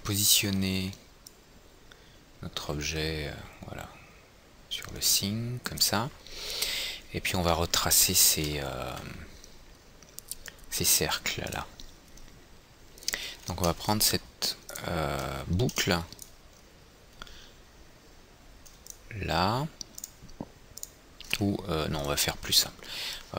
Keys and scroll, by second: 0.9 w, 8.8 F3.